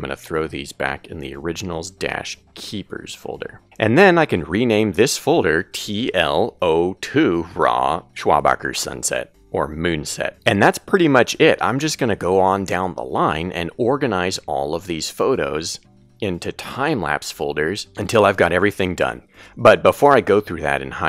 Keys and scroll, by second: 9.1-12.7 typing.